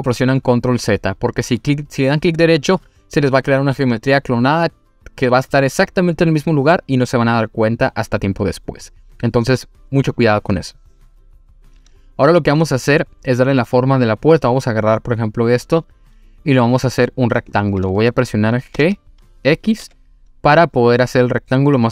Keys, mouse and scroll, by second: 17.3 click, 18.7 g, 19.8 x.